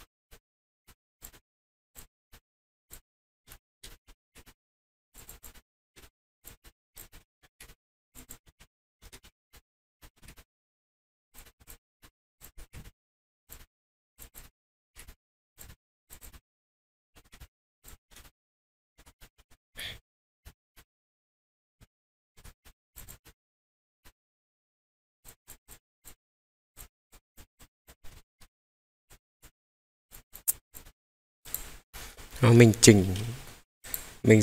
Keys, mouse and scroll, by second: 0.0 middle click, 0.1-0.4 scroll up 3, 0.3 middle click, 0.5 scroll down 2, 0.6 scroll up 1, 0.7 scroll down 1, 0.8 middle click, 0.8 scroll down 1, 1.2 click, 1.2 scroll up 1, 1.3 middle click, 1.6-2.0 scroll down 2, 1.9 click, 2.0 scroll up 2, 2.2 scroll down 1, 2.3 middle click, 2.3-2.6 scroll down 1, 2.9 click, 3.5 shift+middle click, 3.9 middle click, 4.4 middle click, 4.4 g, 5.1 click, 5.4 click, 5.5 middle click, 6.0 middle click, 6.4 click, 6.6 middle click, 6.9 click, 7.1 middle click, 7.6 middle click, 7.6 g, 8.1 click, 8.2 drag, 9.0 ctrl+z, 9.5 middle click, 9.5 scroll up 4, 9.7 scroll down 2, 9.8 scroll up 2, 10.0 middle click, 10.1 scroll down 1, 10.3 middle click, 10.3 g, 11.3 click, 11.4 middle click, 11.6 click, 11.7 scroll up 2, 11.8 scroll down 1, 12.0 middle click, 12.4 click, 12.7 g, 12.8 middle click, 13.5 click, 13.5 middle click, 14.1 click, 14.1-14.7 scroll down 3, 14.4 middle click, 14.9 g, 15.0 middle click, 15.5 click, 15.6 middle click, 16.0 click, 16.2 click, 16.3-16.9 middle drag, 17.3 middle click, 17.3 g, 17.8 click, 18.1 r, 18.2 middle click, 19.2 Escape, 19.2 middle click, 19.2 scroll down 1, 19.7 Escape, 19.7 scroll down 1, 19.8 r, 20.4-22.3 middle drag, 22.6 middle click, 22.6 scroll up 2, 22.9 click, 23.1 scroll down 1, 23.2 middle click, 24.0 middle click, 24.0 scroll up 1, 25.2 click, 26.1 click, 26.7 click, 27.1 click, 27.5 click, 29.0 click, 29.0-29.4 scroll up 3, 30.1 click, 30.7 click, 30.8 middle click, 30.8 scroll down 1, 31.4 click, 31.4 scroll down 2, 32.0-32.5 middle drag, 33.9-34.4 drag.